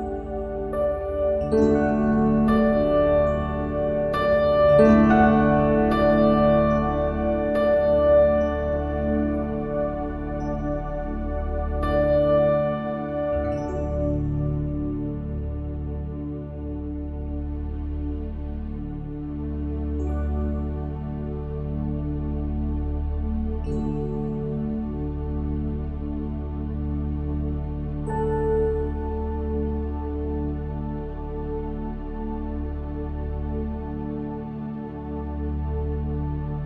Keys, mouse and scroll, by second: 0.1-1.7 drag, 2.5 middle click, 3.3 Tab, 5.9-7.9 drag, 7.4 ctrl+b, 13.3-17.1 middle drag, 17.1 a, 17.7 a, 19.3-21.3 drag, 24.4-26.5 middle drag, 27.1 KP_1, 31.3 Tab, 32.2 Tab, 32.7 middle click, 33.5-36.6 middle drag.